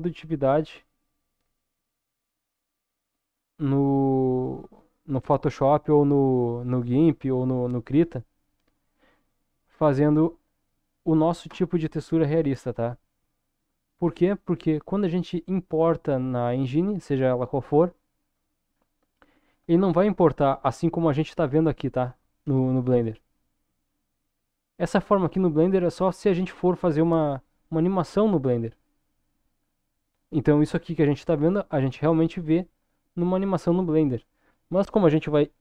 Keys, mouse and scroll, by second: 14.1-16.7 scroll down 3, 21.2 middle click, 22.5 KP_0, 23.9-24.3 scroll down 2, 24.5-25.6 scroll down 1, 26.0-26.5 scroll up 2.